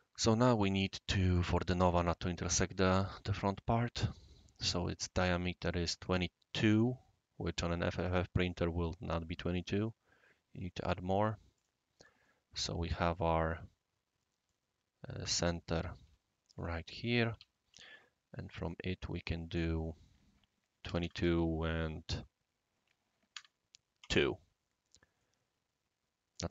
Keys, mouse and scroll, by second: 0.2 scroll down 1, 0.5-1.1 middle drag, 3.0 scroll up 2, 3.1 scroll down 1, 3.4-4.1 scroll up 3, 4.6 click, 5.1 drag, 6.5 scroll down 1, 6.6 scroll up 1, 6.9 scroll down 1, 7.0 scroll up 1, 7.3 scroll down 1, 7.7-8.1 middle drag, 8.5 click, 10.8 click, 11.5 click, 12.2-14.5 right drag, 16.0 u, 16.5 click, 17.3 Escape, 17.7 c, 18.6 click, 19.7 click, 20.8 2, 21.1 ., 23.3 2, 24.0 Return, 25.1-26.3 middle drag.